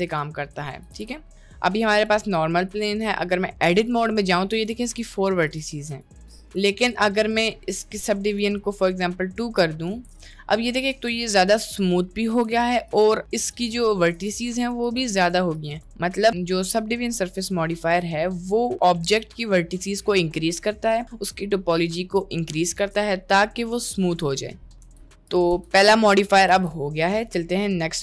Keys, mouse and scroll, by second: 0.9 g, 2.4 middle click, 2.8 Tab, 3.1 middle click, 3.9 middle click, 4.6 click, 6.1 Tab, 6.3 middle click, 6.5 click, 6.8 click, 8.3 click, 9.9 ctrl+a, 11.0 click, 12.2 middle click, 12.5 Tab, 13.0 click, 13.6 click, 14.5 click, 14.9 click, 16.3 Tab, 18.6 middle click, 24.9 Delete, 25.7 Delete, 26.7 ctrl+z.